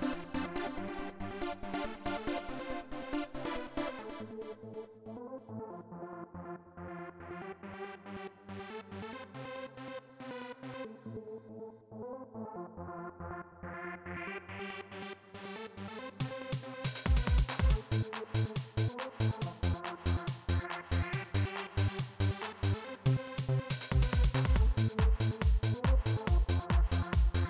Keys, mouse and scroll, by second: 2.6 click, 6.0 click, 7.1 click, 8.1-10.0 drag, 11.1 right click, 12.5 click, 14.0 click, 15.3 click, 16.6 click, 17.3 click, 18.6 right click, 20.2 click, 23.1-24.7 drag, 27.0 click.